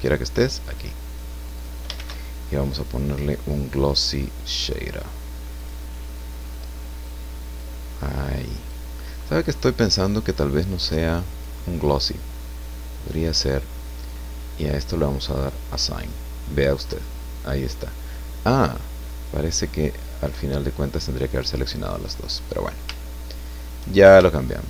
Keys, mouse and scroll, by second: 0.7 click, 1.5 click, 1.9 shift+a, 3.9 click, 5.6 click, 7.5-8.9 drag, 9.9-11.6 drag, 15.3 click, 16.9-18.1 drag, 22.6 scroll up 1, 23.0 shift+middle click, 24.3-24.6 shift+middle drag.